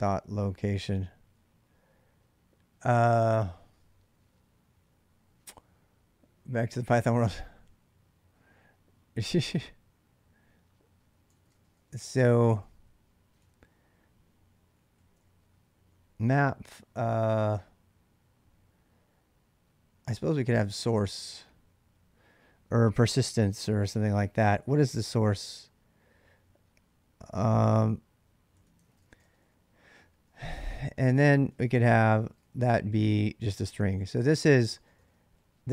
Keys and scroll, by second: 11.1-13.2 typing, 14.3-16.2 typing, 19.6-21.1 typing, 28.6-35.7 typing.